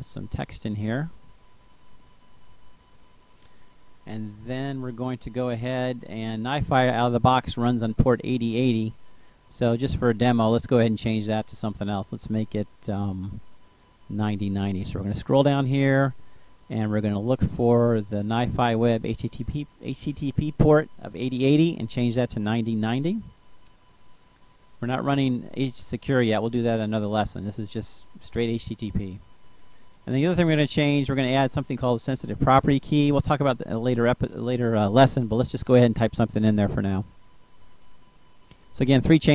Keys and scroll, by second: 0.0-2.3 typing, 22.2 9, 22.9 0, 33.0-35.2 typing, 37.4-39.3 typing.